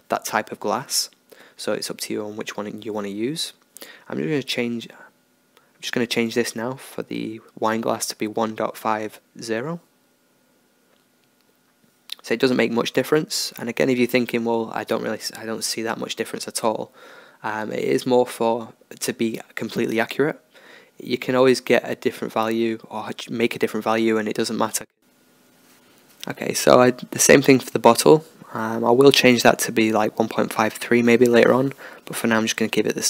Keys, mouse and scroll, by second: 4.4-6.4 drag, 6.6 BackSpace, 13.6-15.6 drag, 15.8-17.1 drag, 20.1 BackSpace, 28.2 middle click, 28.3-32.8 middle drag, 31.0-32.1 drag.